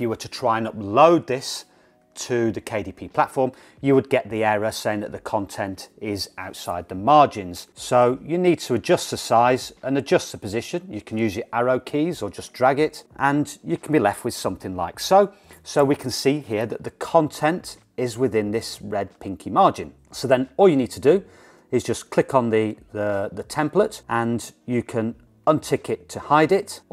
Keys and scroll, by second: 11.6 Down, 11.9 Down.